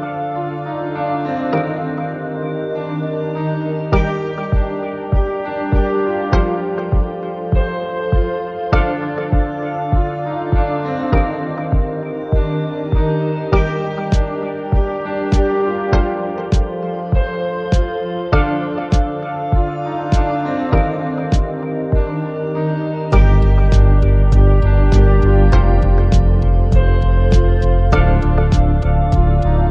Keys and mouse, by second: 19.8 n, 20.0 middle click, 20.5 shift+a, 24.0 middle click, 24.2 middle click, 24.4 middle click, 25.6 z, 26.0 middle click, 26.8 shift+a, 28.1 middle click, 28.6 click, 29.0 shift+a.